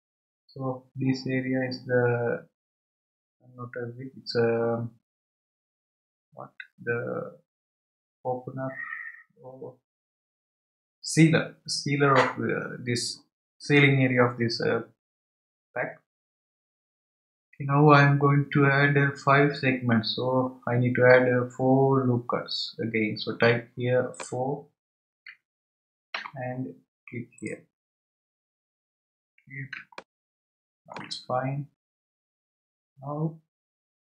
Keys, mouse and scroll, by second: 24.1-28.1 drag, 28.1 scroll up 3, 28.7 scroll down 2, 29.9-31.4 shift+middle drag, 31.4 scroll up 1, 31.9 scroll up 1, 33.2-34.0 scroll down 1.